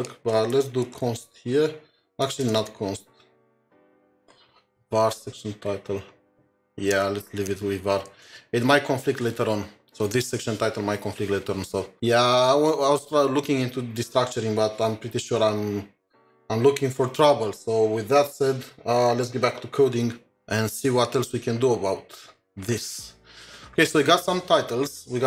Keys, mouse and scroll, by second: 0.9-2.9 typing, 7.0 ctrl+z, 7.5 ctrl+z, 8.2 ctrl+s.